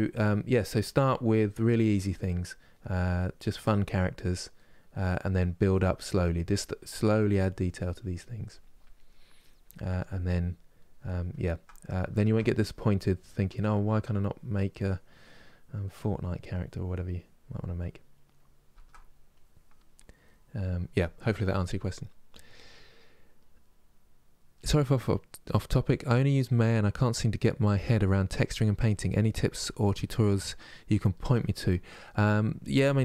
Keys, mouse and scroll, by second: 0.0 click, 0.7 middle click, 1.1 click, 1.5 middle click, 2.0 click, 2.4 middle click, 2.8-4.3 drag, 4.3 middle click, 4.7 click, 5.1 middle click, 5.5 click, 5.9 middle click, 6.3-7.6 drag, 7.6 middle click, 7.9 click, 8.8 middle click, 9.1 click, 10.1-12.3 middle drag, 12.3-13.4 drag, 13.4 middle click, 13.9-15.6 drag, 15.6 middle click, 16.1-17.5 drag, 17.5-19.0 middle drag, 19.0 click, 19.7 middle click, 20.1-30.9 drag, 30.9-32.8 middle drag, 32.8 click.